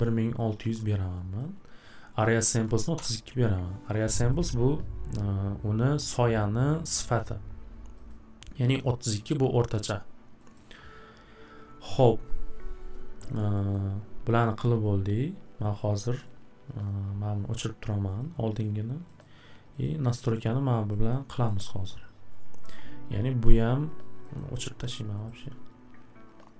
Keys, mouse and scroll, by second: 1.6 click, 2.2-3.0 typing, 3.4 click, 4.3 click, 8.1 click, 8.8 click, 10.5 click, 13.7 scroll, 15.1-15.6 scroll, 16.2 click, 18.2 click, 18.6 click, 19.2-19.8 scroll, 19.8 click, 21.1-21.5 scroll, 24.3-24.8 scroll, 25.2 click.